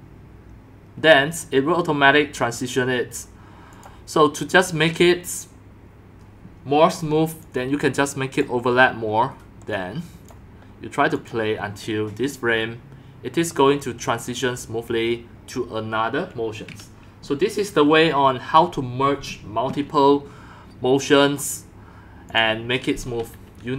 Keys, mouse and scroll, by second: 3.7 click, 5.3-6.7 drag, 7.4-8.4 drag, 9.7-10.3 drag, 11.1 click, 20.1-20.5 scroll down 3, 22.4 click, 23.1 drag, 23.3-23.7 drag.